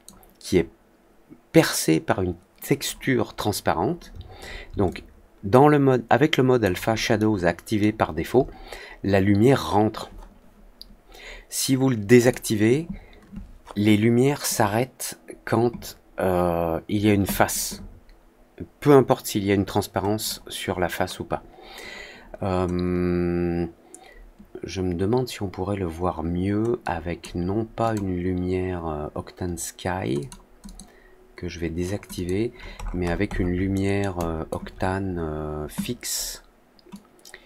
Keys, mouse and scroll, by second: 4.8-6.5 alt+drag, 7.1 alt+middle click, 12.1 alt+click, 20.1-27.1 alt+drag, 27.8 alt+click, 30.1 alt+click, 30.6 alt+click, 32.1 alt+click, 32.7 alt+middle click, 32.7 alt+scroll up 1, 33.0-33.4 scroll down 2, 33.7-34.0 alt+middle drag, 34.1 alt+click, 36.8-37.4 drag.